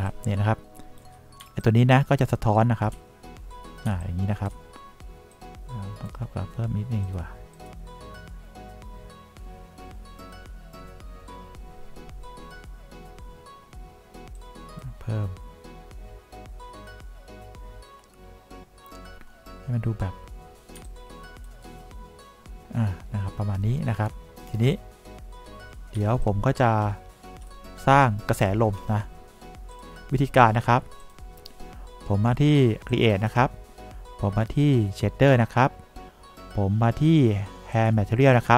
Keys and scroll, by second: 0.3 3, 3.2 2, 4.2 3, 21.2 3, 26.4 3.